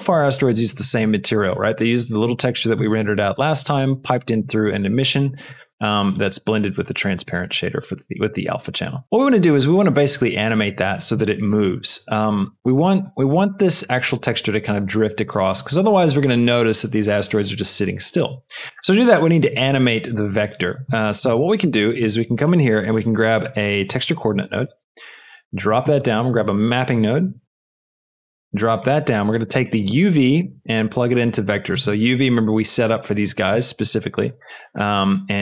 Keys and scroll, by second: 21.5 shift+a, 23.8 t, 24.0 e, 24.2 x, 24.6 Return, 26.0 shift+a, 27.0 m, 27.1 p, 27.7 Return.